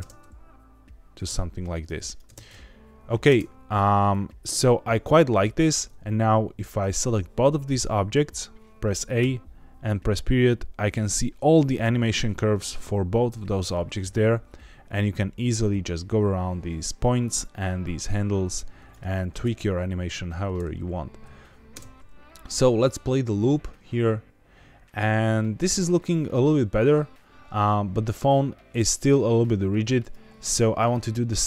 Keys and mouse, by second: 1.5 click, 2.0 click, 4.0 click, 8.0 a, 9.1 KP_Decimal, 17.7-18.9 drag, 19.1 ctrl+z, 21.6 space, 30.0 click, 30.7 click.